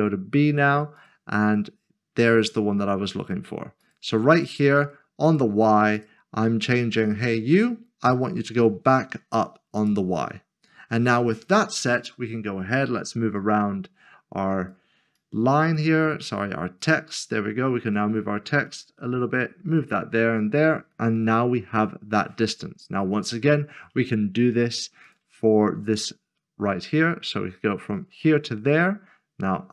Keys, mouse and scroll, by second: 1.0 double click, 1.5 click, 3.8 click, 5.3 double click, 5.9 double click, 6.8 click, 9.8 click, 13.4 click, 21.7-23.0 scroll down 1, 23.0-23.5 scroll up 1, 25.0 click, 26.7 s, 27.8 shift+click.